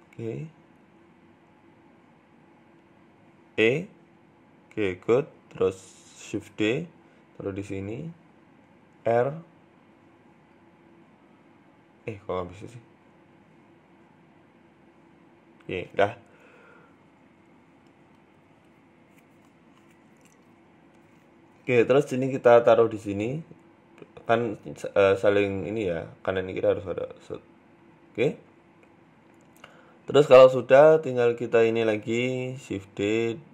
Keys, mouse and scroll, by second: 0.4-0.7 scroll up 2, 0.7 shift+middle click, 1.3 right click, 2.0 shift+middle click, 2.5 right click, 3.3 e, 4.8-5.2 scroll down 1, 5.3 click, 5.3-6.6 scroll down 3, 6.6 shift+d, 8.1 shift+middle click, 8.4-9.1 scroll up 2, 9.1 r, 10.5 right click, 10.8 r, 11.6 r, 12.7 right click, 13.9 right click, 16.3-17.4 scroll down 2, 16.5 middle click, 17.6 KP_3, 18.2 KP_1, 19.1 click, 19.9 shift+middle click, 20.3 shift+right click, 21.5 g, 24.0 r, 25.4 shift+d, 26.8 r, 28.4 scroll down 3, 28.5 Tab, 28.6 middle click, 29.9-30.4 scroll down 1, 30.4 scroll down 1, 30.7 right click, 31.2 right click, 31.7 KP_3, 32.4 Tab, 32.6-33.2 scroll up 1, 33.2 right click, 33.2 scroll up 2, 33.4 shift+middle click.